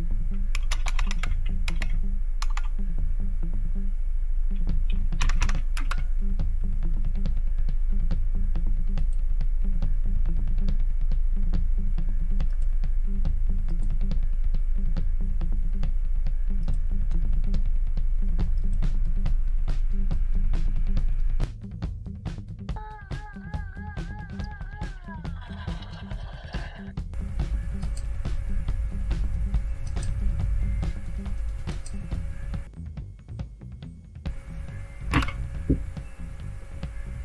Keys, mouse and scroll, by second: 0.3-2.4 typing, 5.2 Down, 5.4 Down, 5.7 Return, 9.0 click, 10.1-10.9 scroll down 2, 12.4 click, 13.7 click, 16.6 click, 18.6 click, 22.1 right click, 23.1 scroll down 2, 23.4 click, 23.8 click, 24.1 click, 24.4 click, 24.8 click, 25.4 click, 25.8 click, 26.0 drag, 26.1 click, 26.5 click, 26.8 click, 27.8 click, 29.9 click, 31.7 click, 35.1 Return.